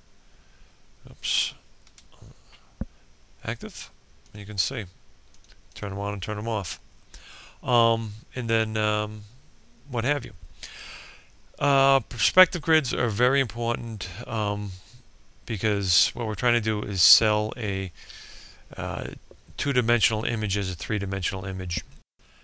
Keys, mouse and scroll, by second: 0.8 click.